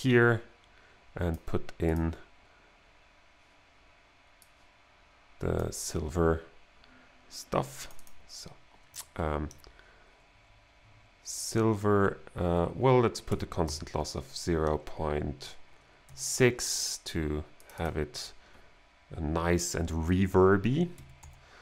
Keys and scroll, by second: 13.3 0, 13.7 ., 16.1 6, 20.7-21.6 typing.